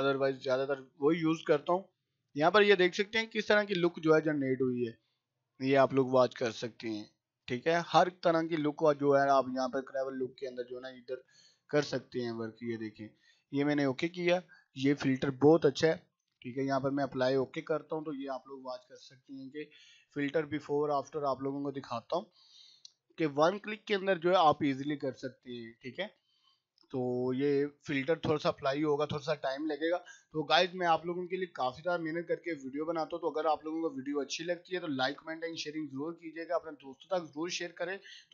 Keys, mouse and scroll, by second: 2.1 scroll up 1, 3.3-3.8 scroll down 1, 13.0 click, 13.9 scroll up 1, 16.9 click, 22.3 click.